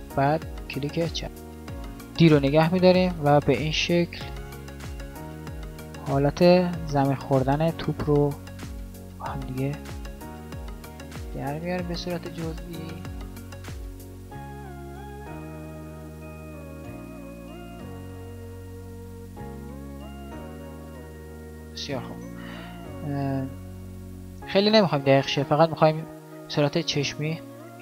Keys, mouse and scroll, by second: 0.0-1.0 d, 1.2 n, 3.5 d.